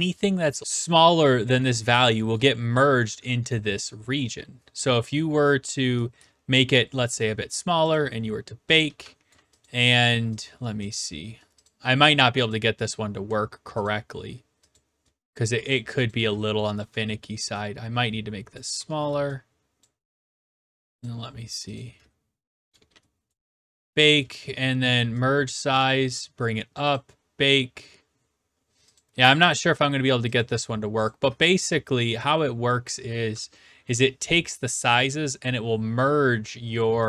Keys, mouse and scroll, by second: 1.6-2.0 typing, 2.4-3.4 right drag, 7.1 click, 7.9 click, 8.7-9.5 typing, 9.3 right click, 9.6 click, 10.4 click, 10.9 click, 11.7 click, 12.5 click, 13.8 click, 14.8 click, 15.7 click, 16.1 click, 17.0 r, 18.5 click, 18.7 w, 19.8 click, 21.8 click, 22.7-24.6 typing, 23.3 right click, 24.2 right click, 26.2 click, 26.9 click, 29.0 click, 29.4 w, 30.4 click, 31.1 click, 32.2 click.